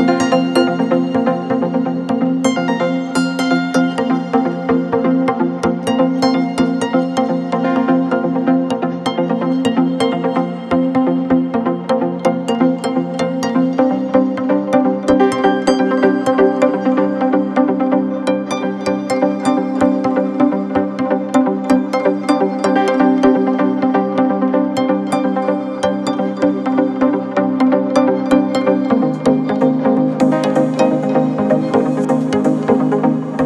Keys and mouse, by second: 12.0 x, 21.3 Tab, 21.5 middle click, 22.1 click, 22.5-33.4 shift+middle drag, 22.8 shift+d, 23.3 Tab, 23.6 a, 24.4 Tab, 25.3-27.7 drag, 27.7-29.4 drag, 30.3 click, 30.7 Tab, 30.9 a, 31.3 x, 31.7 shift+a.